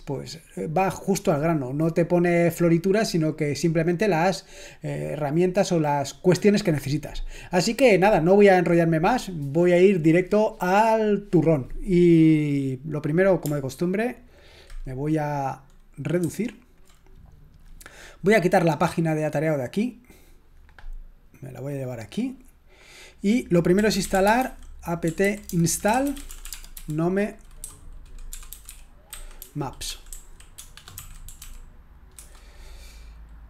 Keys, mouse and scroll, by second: 16.2 ctrl+1, 19.6 click, 19.8-21.9 drag, 23.1 click, 23.5-31.8 typing, 32.1 Return, 33.0-33.4 typing.